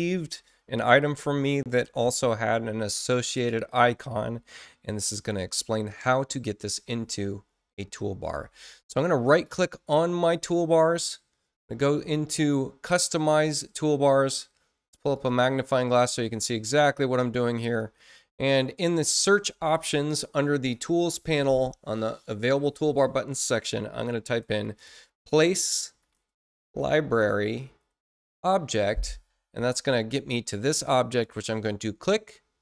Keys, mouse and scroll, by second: 9.3 right click, 13.2 click, 15.1 click, 17.5 click, 18.8 click, 24.6-28.0 typing, 31.2-32.6 drag.